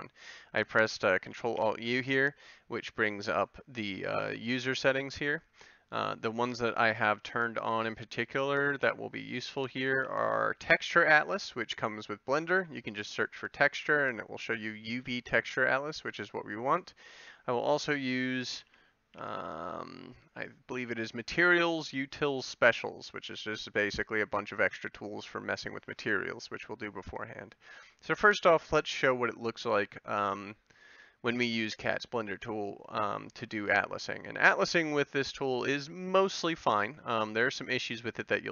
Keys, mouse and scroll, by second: 1.6 ctrl+alt+u, 34.8-38.0 middle drag.